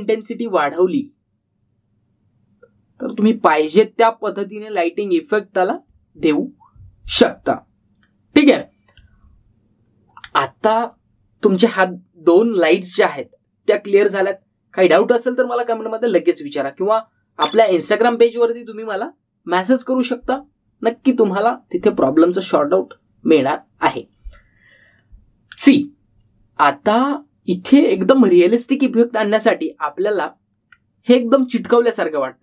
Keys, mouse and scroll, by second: 8.9-9.4 scroll up 1, 9.4-10.1 middle drag, 11.1-12.9 scroll down 1, 25.7-26.1 scroll up 1, 28.9-29.5 middle drag, 31.7-32.4 scroll down 1.